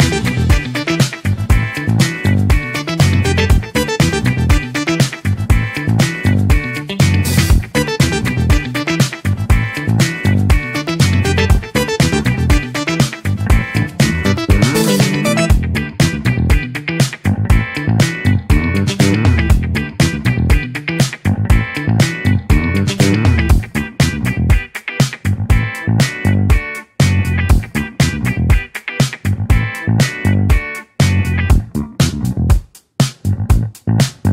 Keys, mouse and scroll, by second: 2.9-5.9 drag, 7.2-10.3 drag, 12.2 click, 16.4 click, 21.3 click, 25.1 click, 25.9 click, 29.0 click, 30.5 click, 31.7 click, 32.5-33.0 middle drag, 33.0 click.